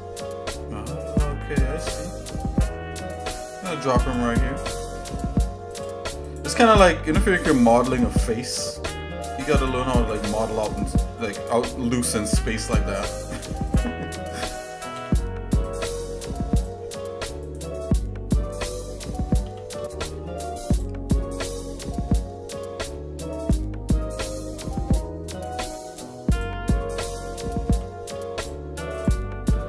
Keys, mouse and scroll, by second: 4.8 click, 6.3 click, 8.0 g, 10.0 click, 11.0 click, 12.3 g, 13.7 click, 14.9 g, 16.6 click, 17.4 click, 19.4 g, 21.4 click, 24.0 g, 26.3 click, 27.7 g, 28.9 click.